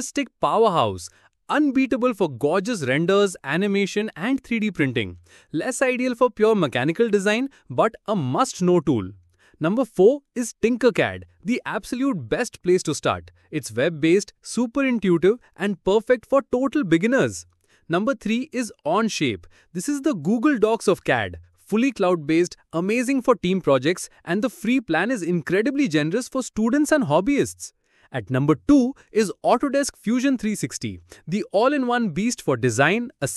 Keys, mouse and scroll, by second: 0.0 scroll down 1, 0.2 shift+g, 0.4 KP_3, 0.7 ctrl+click, 0.7 shift+middle click, 1.0 ctrl+x, 1.1 middle click, 1.3 click, 1.4 scroll down 2, 1.6 shift+g, 1.8 KP_3, 2.1 ctrl+click, 2.1 shift+middle click, 2.4 ctrl+x, 2.6 middle click, 2.7 click, 2.8 scroll down 1, 3.0 shift+g, 3.2 KP_3, 3.5 ctrl+click, 3.5 shift+middle click, 3.9 ctrl+x, 4.0 middle click, 4.1 click, 4.3 scroll down 1, 4.4 shift+g, 4.7 KP_3, 4.9 ctrl+click, 5.0 shift+middle click, 5.3 ctrl+x, 5.4 middle click, 5.6 click, 5.7 scroll down 1, 5.9 shift+g, 6.1 KP_3, 6.4 ctrl+click, 6.4 shift+middle click, 6.7 ctrl+x, 6.9 middle click, 7.0 click, 7.1 scroll down 1, 7.3 shift+g, 7.5 KP_3, 7.8 ctrl+click, 7.8 shift+middle click, 8.1 ctrl+x, 8.3 middle click, 8.4 click, 8.5 scroll down 1, 8.7 shift+g, 8.9 KP_3, 9.2 ctrl+click, 9.2 shift+middle click.